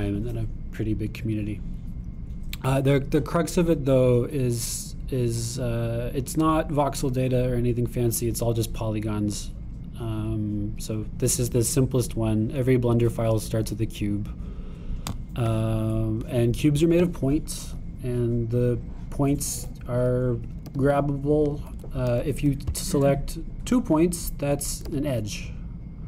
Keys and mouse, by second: 18.8 g, 20.6 `, 21.5 click, 21.7 g, 25.9 g.